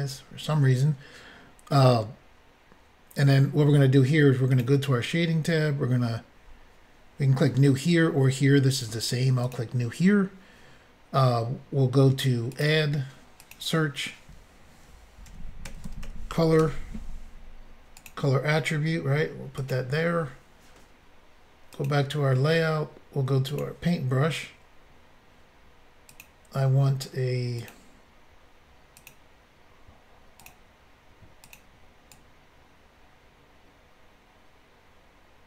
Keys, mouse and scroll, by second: 4.5 click, 4.6 click, 9.4 click, 12.5 click, 13.4 click, 15.3-17.1 typing, 18.0 click, 19.7 click, 21.8 click, 21.9 click, 23.5 click, 23.6 click, 26.1 click, 26.2 click, 27.6 click, 29.0 click, 29.2 click, 30.4 click, 30.5 click, 31.5 click, 31.5 click, 32.1 click.